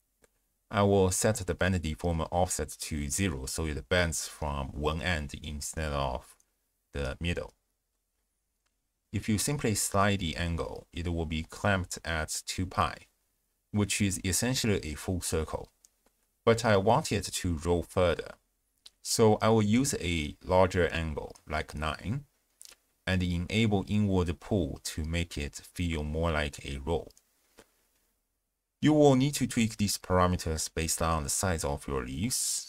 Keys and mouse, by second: 0.7-1.9 drag, 2.5-3.0 drag, 3.5 z, 5.0-5.4 drag, 5.6-7.2 d, 5.9 click, 6.6 click, 9.0 ctrl+alt+shift+w, 9.0 ctrl+alt+shift+q, 10.0-11.2 d, 11.4 d, 12.0 click, 13.4-14.0 shift+drag, 14.7-15.4 drag, 19.6-23.3 drag, 25.0 click, 25.5 click, 26.1-26.7 drag, 27.1 click, 27.7 shift+drag, 29.2-32.6 drag.